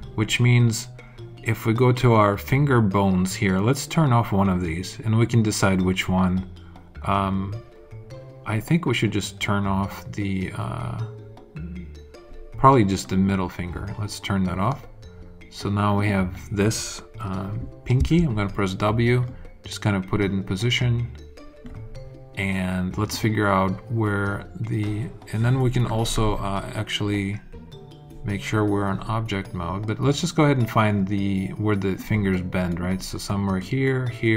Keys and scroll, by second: 17.9 w.